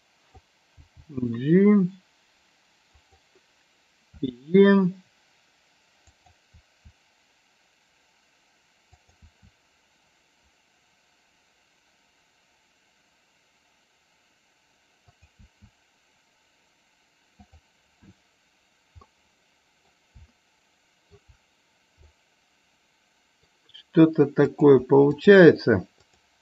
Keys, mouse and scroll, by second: 3.0 click, 6.0 click, 8.9 click, 15.0 click, 17.4 click, 19.1 middle click, 20.4 shift+middle click, 22.0-23.4 middle drag, 24.4 click, 25.9 shift+click.